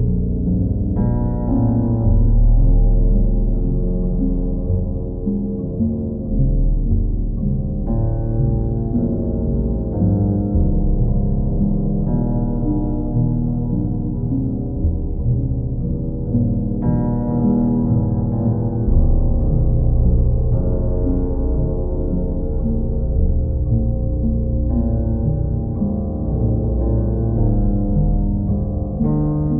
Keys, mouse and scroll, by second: 0.2 click, 0.6 shift+click, 1.6 click, 1.9 shift+click, 3.2 click, 5.1 click, 5.2 ctrl+z, 5.6 ctrl+click, 8.8 click, 9.5 alt+click, 10.5 click, 11.0 shift+click, 11.9 alt+click, 13.3-15.0 ctrl+drag, 16.0 q, 17.3 click, 19.1 click, 19.7 alt+click, 22.7-23.8 drag, 25.5-26.6 drag, 26.7-29.0 drag.